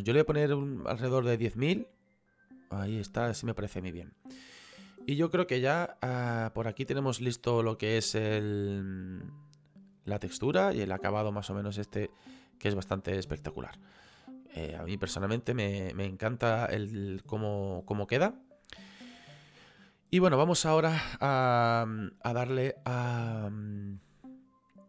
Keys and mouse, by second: 4.3 middle click, 6.5 click, 9.3 click, 12.7 click, 13.8 middle click, 19.4 click, 22.3 middle click, 24.0 middle click.